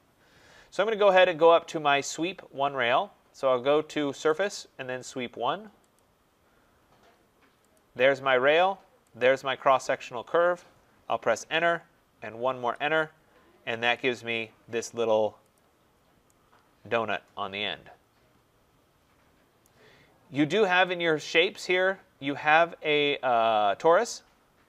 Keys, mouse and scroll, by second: 1.1 click, 4.3 click, 7.6 click, 11.1 Return, 12.4 Return, 13.8 click, 15.5 click, 15.8 middle click, 15.9 middle click, 19.5 right click, 21.9 right click.